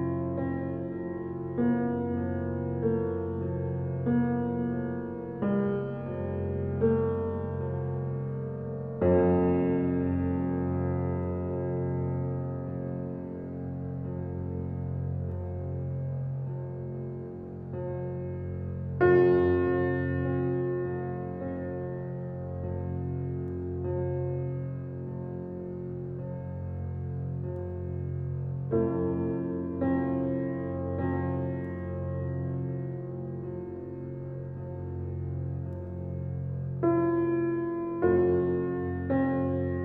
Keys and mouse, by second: 0.0-1.0 drag, 1.3 Tab, 1.7-3.6 typing, 1.8 alt+click, 4.4-6.7 drag, 5.1-7.8 typing, 7.3 alt+click, 8.6 alt+click, 9.3 alt+click, 10.6 typing, 11.7-14.7 alt+drag, 15.1 typing, 15.3 click, 16.1-17.7 drag, 19.2-19.6 typing, 21.0-21.7 typing, 21.9 Page_Up, 22.2 Page_Up, 22.4 Page_Up, 22.7 Page_Up, 23.0 Page_Up, 23.2 Page_Up, 23.6 Page_Up, 27.5-29.5 drag, 29.8 g, 31.0 Page_Down, 31.5 Page_Down, 31.6 Page_Down, 31.7 Page_Down, 31.9 Page_Down, 32.0 Page_Down, 32.2 Page_Down, 32.4 Page_Down, 33.3 x, 34.6-39.6 drag.